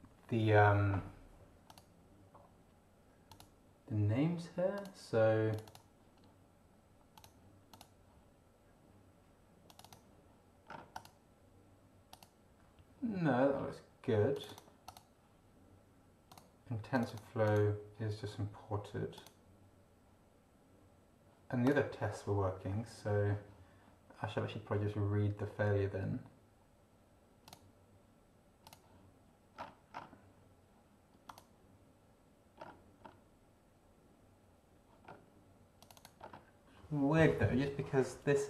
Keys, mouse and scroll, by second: 1.7 click, 3.3 click, 4.7 click, 5.5 click, 7.1 click, 7.7 click, 9.7 click, 10.7 scroll down 2, 10.9 click, 12.1 click, 14.3 click, 14.9 click, 16.3 click, 16.9 click, 17.4 click, 19.1 click, 21.6 click, 27.4 click, 28.6 click, 29.5-30.1 scroll down 4, 31.3 click, 32.6-33.2 scroll up 4, 35.0 scroll up 1, 35.8 click, 36.2-36.5 scroll up 1.